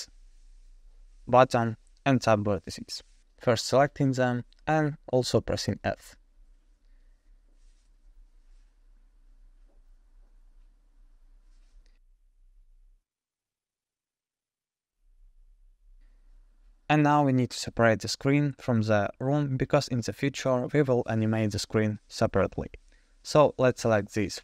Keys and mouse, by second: 1.9 alt+shift+click, 5.5 f, 6.0-6.7 middle drag, 11.3 alt+click, 12.4 alt+shift+click, 15.4 ctrl+click, 16.7 f, 17.4-18.6 middle drag, 20.6 3, 21.2 ctrl+z, 21.2 middle click, 22.7 ctrl+click, 23.2-23.7 middle drag.